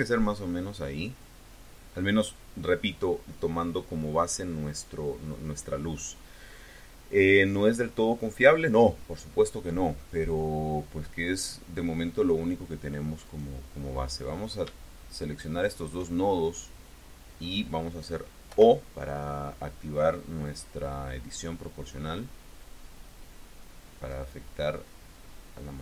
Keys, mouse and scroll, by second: 2.6-3.0 scroll up 2, 9.6-10.3 scroll up 4, 10.3-10.7 scroll down 2, 10.8 scroll up 2, 13.1 click, 15.3 shift+click, 18.3 o, 22.5-23.9 drag, 23.9-24.5 scroll up 1, 25.1-25.4 scroll up 2.